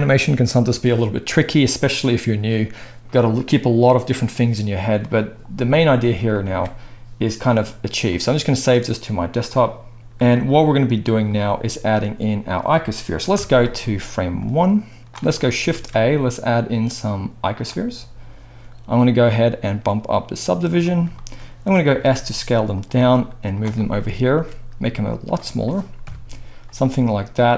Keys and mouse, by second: 6.5 ctrl+s, 10.0 ctrl+s, 13.3 KP_1, 15.7 shift+a, 19.1-22.8 drag, 21.9 s, 22.8-27.5 middle drag, 22.9 g, 24.4 s, 26.0 KP_7, 27.0 s.